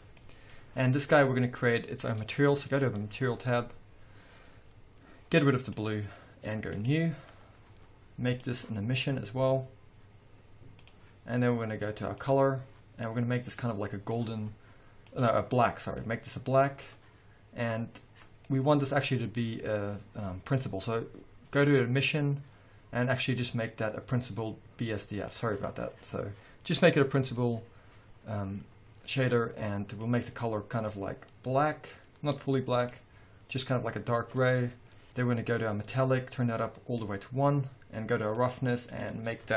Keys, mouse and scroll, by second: 2.7 click, 5.7 click, 6.7 click, 8.3-12.3 drag, 15.1 click, 18.5-21.6 middle drag, 18.9-21.6 scroll up 2, 21.6-30.2 drag, 36.1-39.5 drag, 37.3-38.0 scroll down 2, 38.0-38.5 scroll down 1.